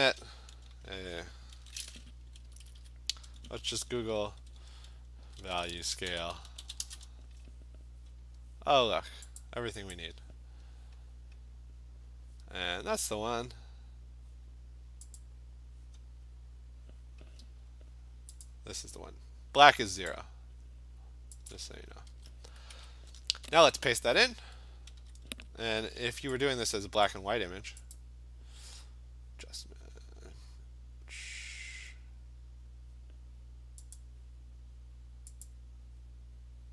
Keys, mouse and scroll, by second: 1.6 ctrl+n, 2.5 super+Left, 2.6 super+Left, 2.8 super+Left, 5.0-7.2 typing, 8.4 typing, 9.4 click, 9.9 click, 10.6 Return, 10.6-11.5 typing, 15.2 click, 17.5 scroll, 18.5 click, 20.1 right click, 21.5 click, 22.1 alt+Tab, 22.7 alt+Tab, 23.5 alt+Tab, 24.2 ctrl+v, 25.1 v, 26.0 v, 27.1 click, 27.1 typing, 28.0 click, 34.0 click, 35.5 click.